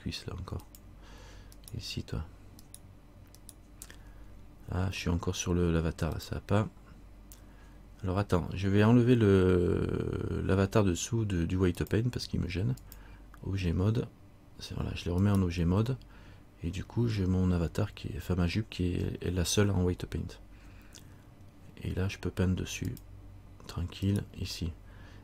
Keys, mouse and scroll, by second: 0.8 click, 1.7 right click, 6.3 click, 15.4 right click, 20.4-21.7 scroll up 1, 23.0 click, 24.2 right click.